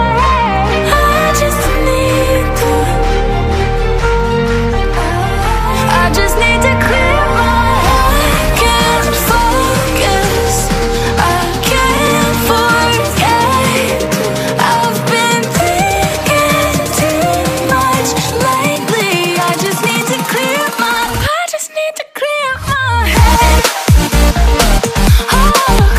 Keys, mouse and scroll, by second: 3.1 click, 4.5 click, 8.6 right click, 8.7 double right click, 10.0 click, 13.2 click, 16.7-21.8 drag.